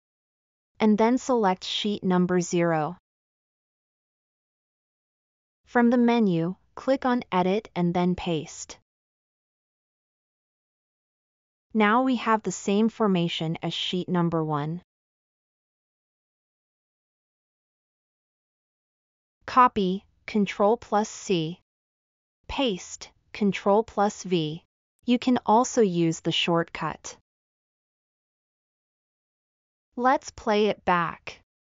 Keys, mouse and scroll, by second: 27.6 scroll up 2, 28.7 middle drag, 29.0-29.6 scroll up 4.